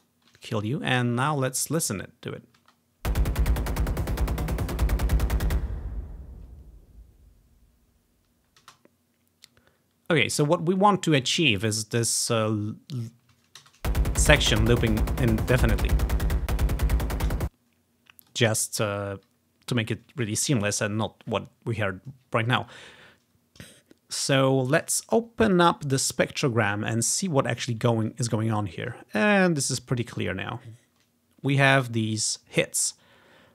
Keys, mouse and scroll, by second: 0.1-1.5 drag, 2.6 space, 8.7 space, 11.3-14.5 drag, 13.7 shift+space, 17.4 space, 18.3 click, 19.2-20.4 drag, 25.6 click, 26.8 click, 27.3-28.6 drag, 29.6 scroll up 1, 30.3 scroll up 1.